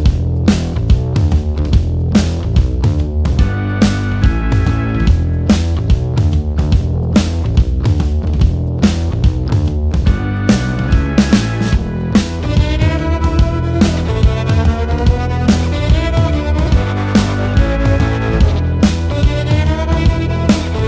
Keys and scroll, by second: 0.3-1.3 typing, 2.5 space, 3.8 h, 4.8 space, 6.7 m, 9.2 space, 10.7 l, 13.2-14.9 typing, 16.1 space, 17.0 m, 20.0 /, 20.3 3, 20.5 Return.